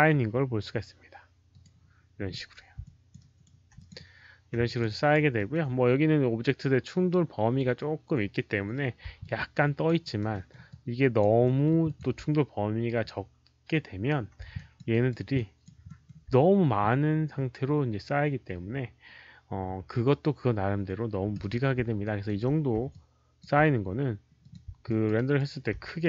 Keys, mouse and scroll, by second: 1.5 click, 2.7 alt+click, 3.1 alt+right click, 3.7 click, 4.6 click, 4.8 alt+right click, 5.3 alt+middle click, 9.0 alt+middle click, 9.0 alt+right click, 9.1 alt+click, 9.9 alt+right click, 10.2 alt+middle click, 10.6 alt+click, 11.3 alt+middle click, 11.8 alt+click, 14.4 alt+click, 14.8 alt+right click, 15.2 alt+click, 15.8 alt+middle click, 19.7 alt+middle click, 19.7 alt+click, 20.0 alt+middle click, 20.0 alt+click, 20.0 alt+right click, 21.6 alt+middle click, 21.9 alt+right click, 22.2 alt+middle click, 22.2 alt+click, 22.8 alt+click, 24.3 alt+click, 24.8 alt+click, 25.1 alt+right click, 25.4 alt+middle click.